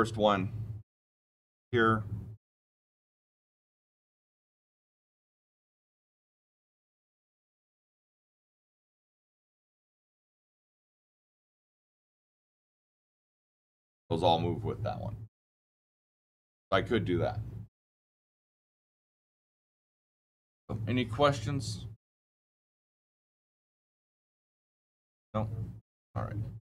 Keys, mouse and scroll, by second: 2.4 click, 2.5 click, 3.6 click, 5.3 click, 6.5 click, 6.9 click, 8.1-9.1 scroll down 6, 9.1 Escape, 10.1 click, 10.2 click, 11.6 click, 13.5 click, 19.5-20.1 shift+middle click, 19.9 shift+middle click, 26.6 click.